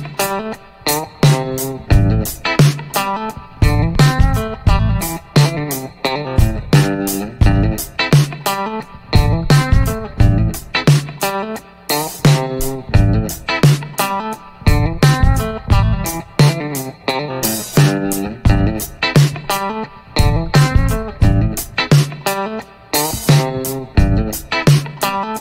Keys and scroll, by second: 13.0 a, 13.4 a, 15.7 g, 16.1 y.